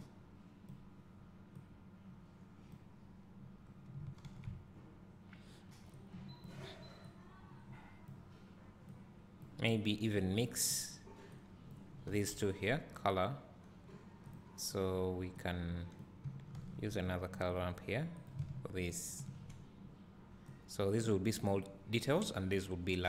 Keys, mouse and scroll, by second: 0.6 click, 1.7-6.2 drag, 9.0 click, 10.3 click, 14.4 click, 14.9 scroll down 1, 15.6 click, 16.9 shift+d, 17.8 click, 18.3 click, 19.1 ctrl+shift+click, 20.7 click.